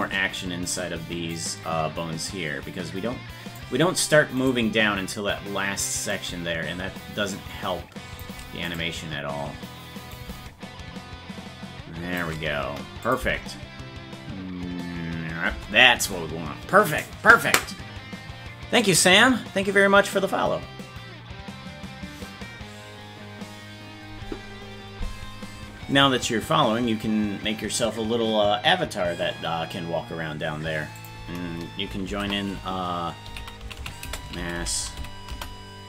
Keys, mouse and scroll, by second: 1.4-3.6 drag, 4.5 right click, 6.1-8.2 shift+drag, 8.8 right click, 10.1-12.2 drag, 13.1 click, 13.7 space.